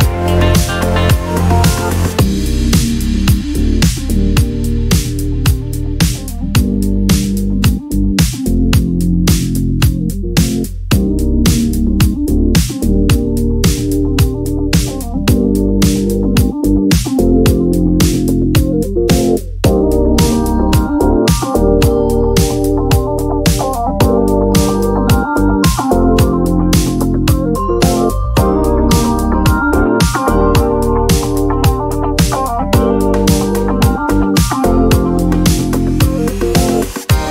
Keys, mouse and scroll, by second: 0.3-1.4 ctrl+shift+drag, 1.6-3.6 ctrl+shift+drag, 4.3 shift+click, 5.7 ctrl+d, 6.0-7.4 ctrl+drag, 8.1-9.6 ctrl+shift+drag, 10.2 click, 10.6 click, 12.0 ctrl+shift+click, 13.5 click, 14.5-16.8 ctrl+shift+drag, 17.1 click, 18.3-20.6 drag, 21.2 click, 21.9 click, 22.7 click, 23.7-25.7 drag, 25.9 click, 26.4 ctrl+d, 27.6 shift+click, 31.3 click, 32.0-32.5 ctrl+scroll down 2, 34.0 space.